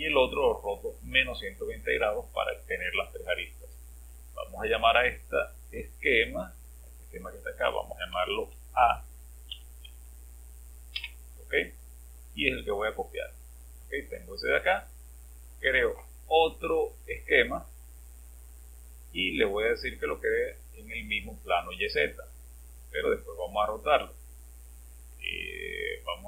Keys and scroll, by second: 8.2 BackSpace, 8.3 BackSpace, 8.4 BackSpace, 9.5 Home.